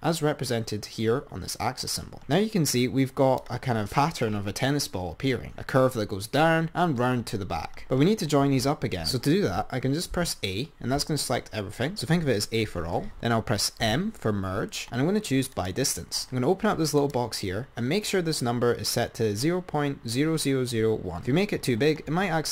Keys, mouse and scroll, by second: 2.3 click, 10.5 a, 14.1 m, 17.2-20.3 drag.